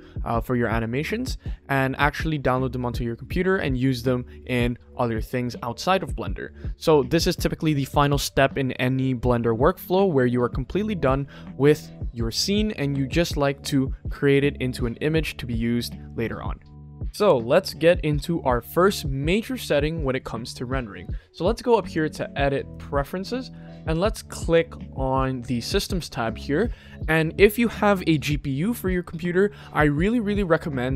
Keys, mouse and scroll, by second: 17.0 click, 21.8 click.